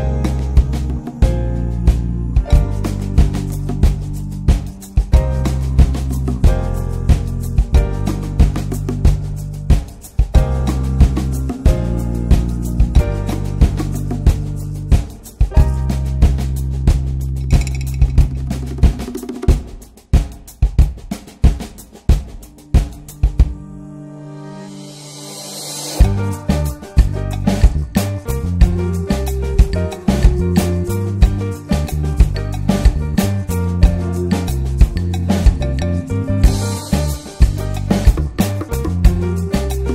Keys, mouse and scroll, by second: 0.0 ctrl+s, 0.7 x, 2.0 scroll down 2, 2.2 middle click, 2.6 ctrl+s, 2.8 Tab, 3.1 Tab, 3.6 2, 3.9 click, 4.3 alt+shift+click, 4.7 ctrl+s, 5.6 f, 6.3 alt+middle click, 6.7 shift+middle click, 7.0 ctrl+s, 7.2 shift+middle click, 7.9 e, 11.1 ctrl+b, 14.9 Tab, 15.3 ctrl+s, 15.5 Tab, 16.0 s, 16.7 ctrl+s, 17.0 click, 17.8 s, 18.8 Tab, 18.8 click, 19.7 ctrl+a, 20.2 ctrl+s, 20.3 Tab, 20.7-21.0 scroll down 1, 21.0 ctrl+b, 24.6 middle click, 25.1 click, 25.6 ctrl+z, 25.8 ctrl+z, 26.3 middle click, 26.7-27.1 scroll down 1, 27.1 click, 27.8 middle click, 28.3 s, 28.8 Tab, 29.0 click, 29.3 ctrl+s, 29.4 click, 29.7 Tab, 30.2-30.5 scroll up 1, 30.5 ctrl+b, 33.4 Tab, 33.6 middle click, 33.8 Tab, 34.0 click, 34.6 3, 34.8 click, 35.4 alt+middle click, 35.9 scroll up 2, 36.1 ctrl+s, 36.3 shift+middle click, 36.8 g, 39.0 click, 39.5 g.